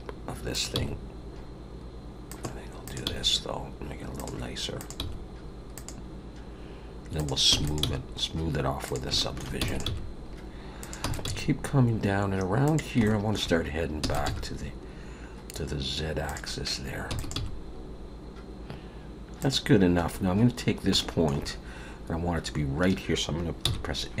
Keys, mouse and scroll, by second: 0.5 click, 0.7 g, 2.8 click, 3.0 g, 4.8 click, 5.0 g, 7.1 click, 7.5 e, 7.8 g, 9.1 shift+middle click, 9.6 e, 9.8 g, 11.0 e, 11.2 g, 13.0 shift+middle click, 14.0 e, 14.2 g, 17.1 e, 17.4 g, 20.0 scroll up 2, 20.6-20.9 scroll down 2, 21.0 shift+middle click, 23.7 n.